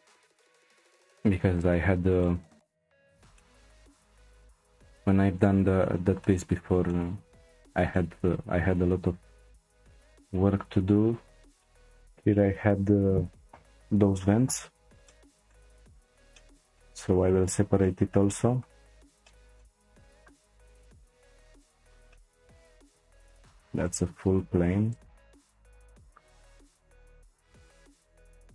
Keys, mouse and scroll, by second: 0.0-0.4 scroll up 2, 0.4 shift+middle click, 1.0-1.7 scroll up 1, 1.7-2.2 scroll up 1, 2.2 shift+middle click, 2.6-3.3 scroll down 2, 3.3-8.4 middle drag, 8.4-9.1 scroll up 4, 9.1-9.7 scroll up 1, 9.7 click, 11.2-11.6 scroll down 1, 11.6-13.5 shift+middle drag, 13.5 p, 15.1-20.1 shift+middle drag, 20.1 click, 20.7 shift+click, 21.4 shift+click, 21.8 shift+click, 22.1-23.2 middle drag, 23.2 shift+click, 23.8 shift+click, 24.9 shift+click, 26.0 shift+click, 26.7 shift+click, 27.5 c.